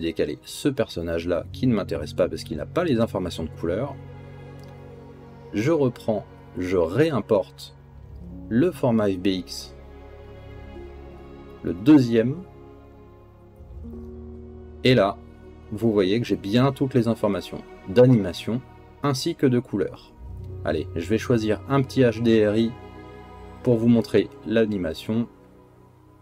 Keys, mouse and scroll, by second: 1.7 click, 3.6 g, 7.3-9.8 drag, 16.4 click, 19.0-21.1 middle drag, 21.1 click, 21.2 middle click.